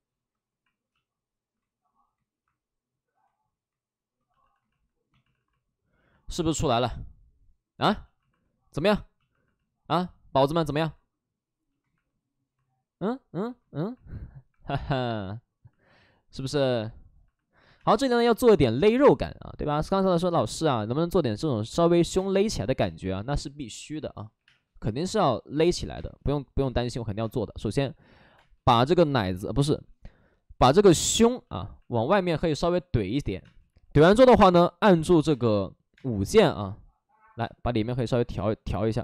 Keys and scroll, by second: 3.0 space, 4.3 shift+f, 5.2 alt+s, 17.7 space, 21.7-24.3 typing, 25.7 ctrl+z, 25.8 space, 31.5 space, 33.4 space, 35.1 5, 35.9 space, 37.4 space.